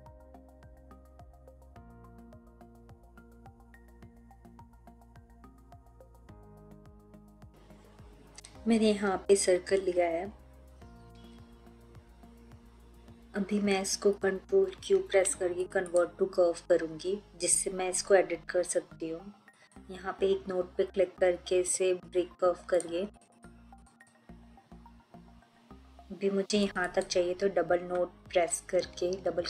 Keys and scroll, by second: 14.8 ctrl+q.